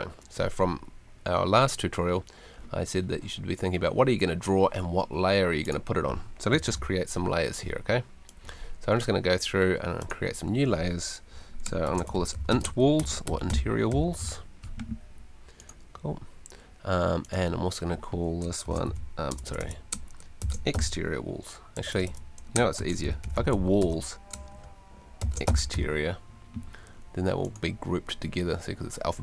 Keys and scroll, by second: 6.6 super+l, 11.6-14.2 typing, 18.4-26.2 typing.